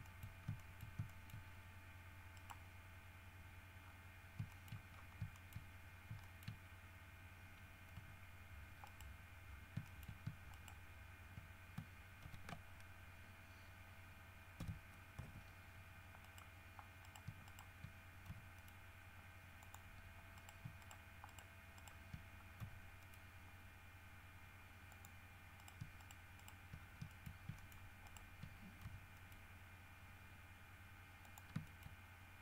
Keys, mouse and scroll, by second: 0.2 shift+middle click, 0.5 shift+scroll up 1, 0.7 shift+middle click, 1.3 shift+middle click, 1.7-2.0 shift+scroll up 2, 2.5 middle click, 4.0 scroll down 1, 4.7 shift+middle click, 5.1 shift+scroll down 1, 5.5 shift+middle click, 6.1 shift+scroll up 2, 6.4 shift+middle click, 8.1 g, 9.0 right click, 9.7 scroll down 2, 10.0 shift+click, 10.7 shift+right click, 12.4 ctrl+r, 14.7 KP_5, 15.3 KP_Enter, 16.4 right click, 17.2 shift+right click, 17.6 shift+right click, 18.5 shift+g, 18.7 middle click, 19.8 click, 20.5 shift+right click, 21.0 shift+right click, 21.5 shift+right click, 21.9 shift+right click, 22.8 shift+g, 23.2 middle click, 25.1 click, 25.7 shift+right click, 26.2 shift+right click, 26.5 shift+right click, 26.9 shift+scroll up 1, 27.3 shift+middle click, 27.7 shift+middle click, 28.2 shift+right click, 29.0 shift+g, 29.3 middle click, 31.4 shift+middle click, 31.8 shift+middle click.